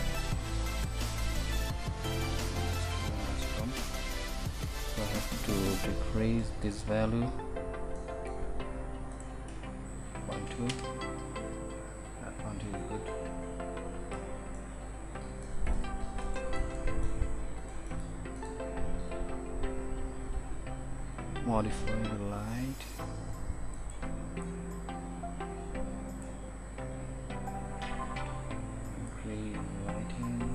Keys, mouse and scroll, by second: 9.4-10.9 middle drag, 11.0-16.2 middle drag, 16.2 ctrl+s, 19.3 ctrl+s, 20.5 middle click, 24.6-26.5 drag.